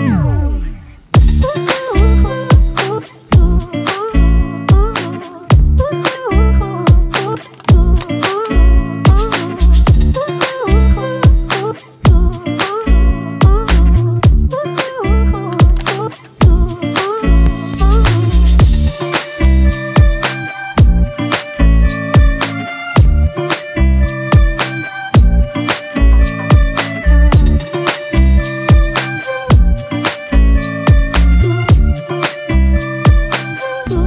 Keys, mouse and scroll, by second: 12.0 alt+scroll up 1.